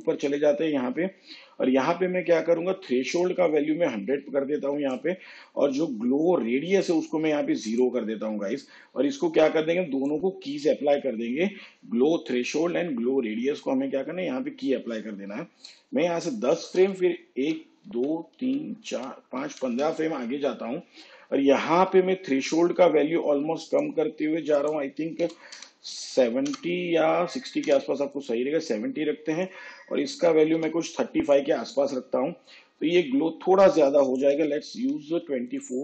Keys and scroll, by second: 16.2 shift+Page_Down, 17.4 ctrl+Right, 25.3 7, 25.6 -, 26.6 BackSpace, 27.8 0, 30.4 3, 30.6 5, 34.5 2, 34.9 4.